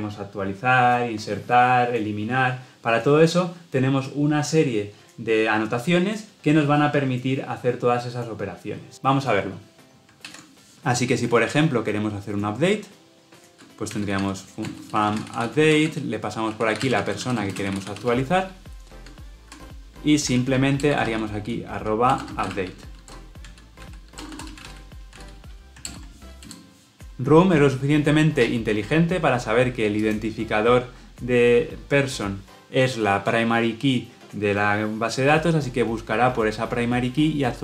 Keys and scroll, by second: 19.4 Escape, 25.8 alt+Return.